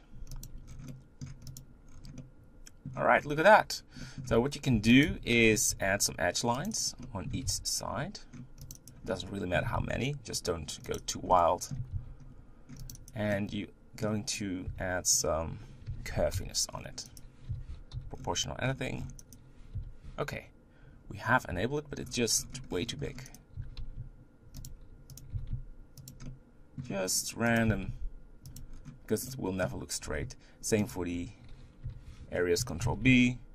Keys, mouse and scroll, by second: 0.7 scroll down 4, 0.9 middle click, 1.2 scroll up 1, 1.5 click, 1.8-2.2 scroll down 5, 2.2 middle click, 3.1-4.0 scroll up 4, 4.0 middle click, 4.3 Tab, 4.7 Tab, 4.9 click, 5.1 Tab, 5.4-5.7 scroll up 4, 5.7 ctrl+r, 7.0 middle click, 7.4 ctrl+r, 9.1 middle click, 9.8 ctrl+r, 11.4 middle click, 11.9 ctrl+r, 13.4-14.7 middle drag, 14.7 1, 15.2 click, 15.9 g, 17.5 o, 18.0 g, 19.7 o, 21.7 g, 23.6 g, 25.2 click, 25.3 g, 26.3 middle click, 26.8 scroll up 1, 27.6 click, 27.8 g, 28.8 scroll down 3, 29.3 middle click, 30.0 scroll up 4, 30.9 alt+click, 31.8 g, 32.8 ctrl+b.